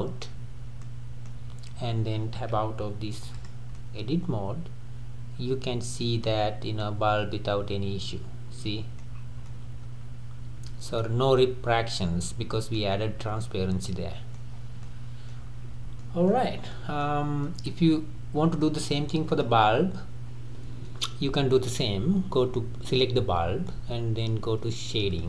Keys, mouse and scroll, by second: 0.6 scroll down 2, 0.8-2.8 middle drag, 2.8 Tab, 3.6 click, 3.8-6.5 middle drag, 6.5 scroll up 2, 6.8-9.1 middle drag, 9.1 scroll up 3, 9.5-12.9 middle drag, 12.9 scroll up 1, 13.0-13.4 scroll down 2, 13.4-14.5 middle drag, 14.5-14.8 scroll down 3, 14.8-15.7 middle drag, 15.7-16.0 scroll up 2, 16.0-16.4 middle drag, 16.4 scroll down 3, 16.7-17.8 middle drag, 17.8-18.8 scroll up 3, 18.8 click, 19.4 click, 20.3-21.5 scroll down 3, 21.5 click.